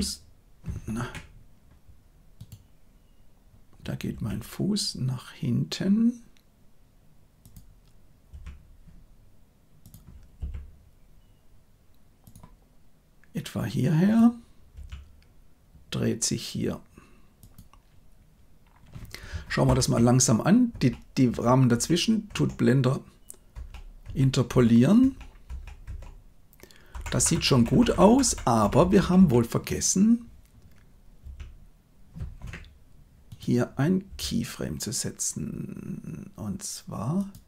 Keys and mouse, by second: 4.1 g, 8.2 r, 10.3 g, 14.7 r, 19.6 shift+Left, 20.7 Right, 21.2 Right, 21.7 Right, 22.2 Right, 23.5 Right, 24.0 Right, 24.4 Right, 25.0 Right, 25.4 Right, 25.8 Right, 26.9 Left, 27.1 Left, 27.3 Left, 27.5 Left, 27.7 Left, 27.8 Left, 28.0 Left, 28.2 Left, 28.5 Right, 28.7 Right, 28.9 Right, 29.1 Right, 31.1 r, 34.0 r.